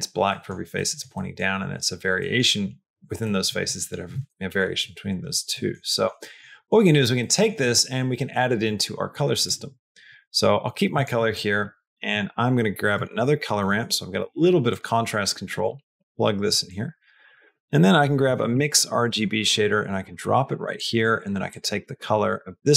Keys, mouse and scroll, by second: 0.1 middle click, 0.6 middle click, 1.0 middle click, 2.0 middle click, 3.1 middle click, 3.5 middle click, 5.4 middle click, 5.7 middle click, 6.0 middle click, 6.4 middle click, 6.7 middle click, 7.0 middle click, 7.4 middle click, 9.3 click, 10.4 click, 10.8 click, 11.2 click, 11.8 shift+a, 15.4 click, 16.7 click, 17.0 shift+a, 20.6 click, 21.3-22.7 drag.